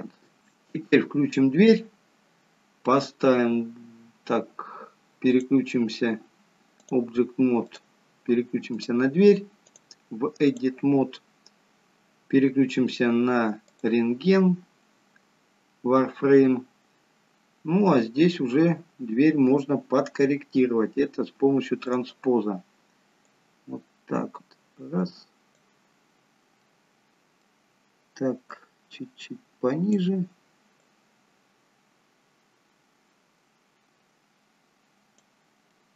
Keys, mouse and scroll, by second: 0.4 click, 5.3 click, 7.8 click, 14.3-16.0 scroll up 1, 18.2-19.4 scroll down 1, 21.9 click, 23.3 click, 26.7 middle click, 28.6 click, 30.9 click, 35.7 middle click.